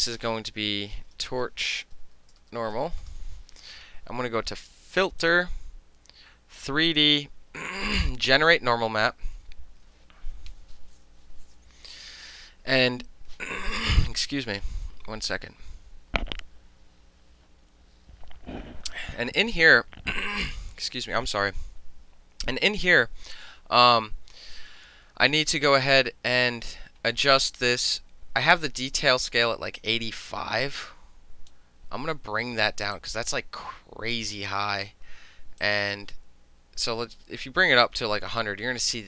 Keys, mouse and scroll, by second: 1.0-3.5 typing, 5.3 click, 7.0 click, 8.4 click, 29.9-31.6 drag, 33.0-34.2 drag, 35.7-37.9 drag.